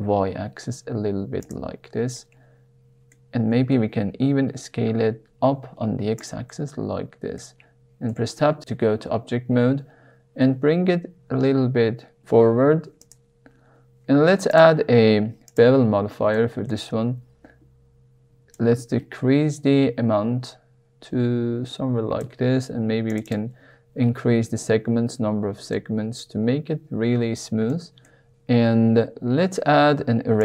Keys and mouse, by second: 1.4 click, 2.1-3.1 middle drag, 3.5 s, 3.7 x, 6.1 click, 6.5 middle click, 6.7 click, 8.1 Tab, 10.3 g, 10.6 y, 12.9 click, 15.5 click, 16.3-16.6 shift+middle drag, 18.5-22.2 shift+drag, 23.1 click, 23.2 click, 25.7 middle click, 27.7 middle click, 28.4 shift+middle drag, 30.3 click.